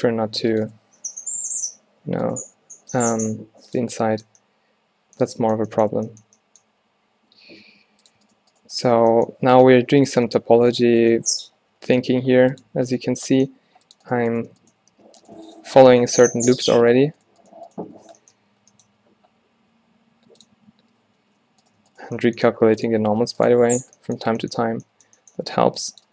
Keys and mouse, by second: 0.0 f, 0.4 ctrl+r, 1.8 shift+w, 2.6 click, 2.6 w, 4.1-5.1 drag, 6.7 w, 7.4 e, 9.0 f, 9.7 g, 11.7 f, 12.1 g, 13.8 ctrl+r, 16.4 f, 18.1 f, 18.4 a, 18.6 a, 18.9 w, 19.5 middle click, 21.3 ctrl+n, 22.5 g, 23.2 r, 23.6 click, 23.6 g, 24.8 a, 25.7 ctrl+r.